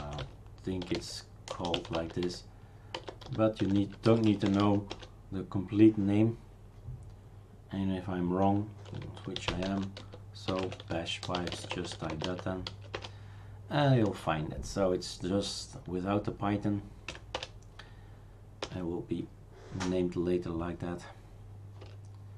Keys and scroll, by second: 0.0-5.1 typing, 8.7-13.2 typing, 17.1 typing, 17.3 Return, 18.6 Return, 21.8 Return.